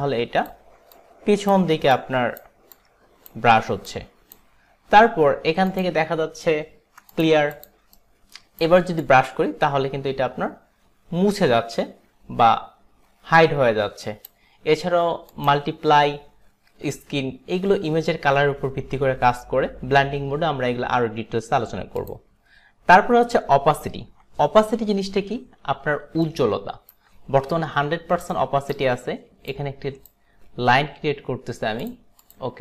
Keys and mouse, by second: 1.0 click, 2.0 click, 2.7 click, 4.0 click, 5.7 click, 7.2 click, 7.6 click, 8.1 alt+right click, 8.1 click, 9.1 click, 15.4 click, 22.0 click, 26.3 alt+right click, 27.7 alt+right click, 28.4 alt+right click, 29.7 click, 32.2 click.